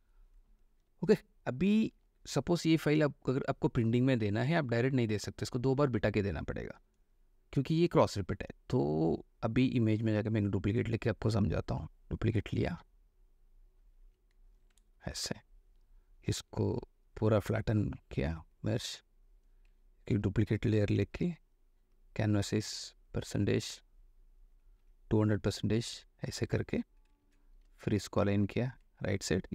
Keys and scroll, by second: 1.0 space, 14.3 f, 14.8 space, 20.4 ctrl+j, 20.9 ctrl+alt+j, 21.2 ctrl+alt+c, 25.1 2, 27.4 ctrl+a, 27.9 ctrl+v.